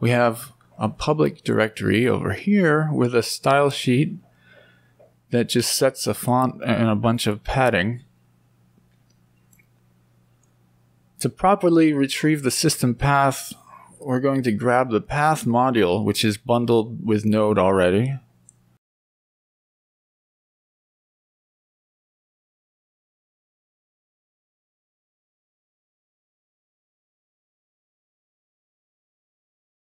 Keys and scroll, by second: 17.6 ctrl+c, 21.8 BackSpace, 22.7 BackSpace, 23.0 Down, 23.2 Down, 23.4 BackSpace, 24.1 Up, 24.3 Up, 24.3 Up, 24.4 Up, 24.5 Up, 24.7 Up, 29.2 Right.